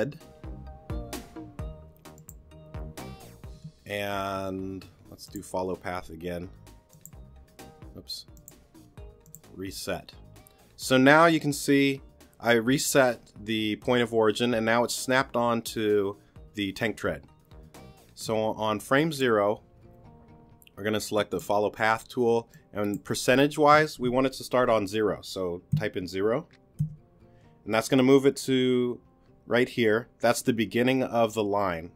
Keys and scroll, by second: 25.7 0.